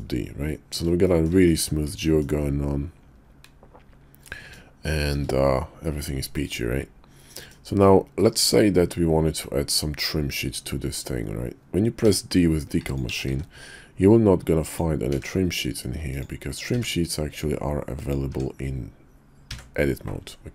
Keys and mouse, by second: 1.0 shift+middle drag, 1.4-2.2 middle drag, 4.2-5.1 middle drag, 6.4-7.5 middle drag, 8.2 middle click, 9.9 middle click, 12.0 d, 13.0 w, 14.6 d, 16.1 d, 16.7 d, 18.3 Tab, 19.5 d.